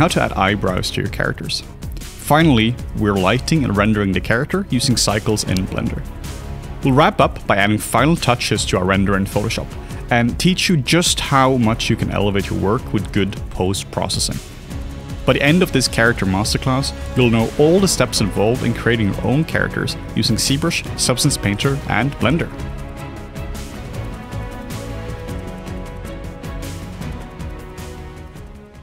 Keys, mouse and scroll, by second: 0.3 double click, 0.4 q, 0.6 q, 1.2 shift+click, 2.6 shift+click, 3.3 ctrl+middle click, 3.8 middle click, 5.3 scroll up 1, 5.3 middle click, 7.9 4, 7.9 ., 8.0 5, 8.1 Return, 8.8 ctrl+z, 9.1 ctrl+z, 10.7 ctrl+z, 11.2 ctrl+z, 14.0 ctrl+z.